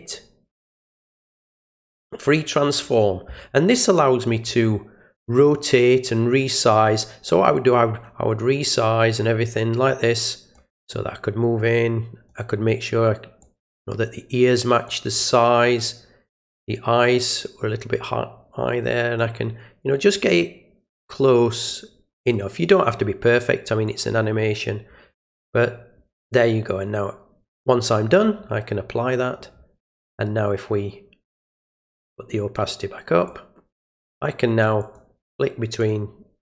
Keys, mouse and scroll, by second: 2.2 click, 3.7 click, 6.0-7.4 drag, 8.6-10.5 drag, 10.9-12.2 drag, 13.4-14.8 drag, 16.4-18.8 drag, 19.1-20.3 drag, 21.6 click, 23.8-25.5 drag, 26.6 click, 29.1 click, 32.5 click, 33.2 click, 34.7 click, 35.7 click.